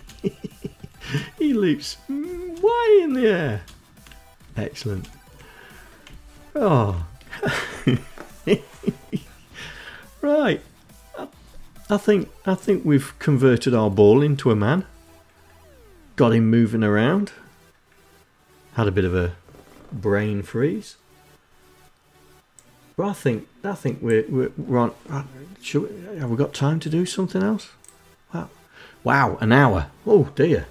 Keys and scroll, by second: 0.3 space, 1.6 space, 2.8 space, 3.8 Right, 4.3 space, 5.4 Right, 6.3 Left.